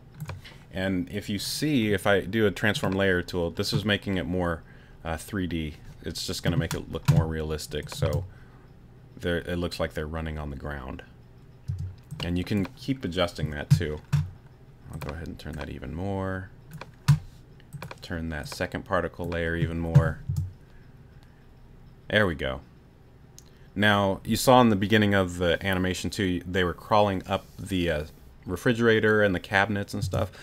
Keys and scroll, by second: 8.0 space, 11.7 space, 20.3 space, 30.0 space.